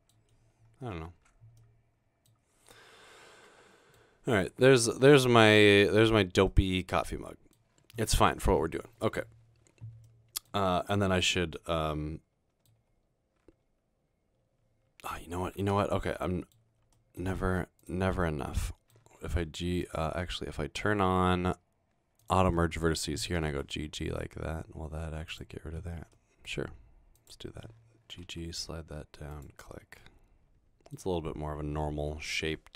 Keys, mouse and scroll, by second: 1.0-1.6 scroll down 2, 1.4 Tab, 1.8-2.4 middle drag, 2.7-4.0 middle drag, 4.3-4.9 middle drag, 5.1-6.2 middle drag, 6.6 middle click, 7.6 scroll down 2, 10.1-10.5 middle drag, 11.1-11.9 scroll down 2, 11.9-12.7 middle drag, 14.9-15.3 scroll up 1, 15.9 Tab, 16.1 middle click, 17.0 middle click, 19.6 g, 23.5 typing, 26.2 middle click, 27.2 click, 28.3 typing, 29.3 click, 30.0 middle click.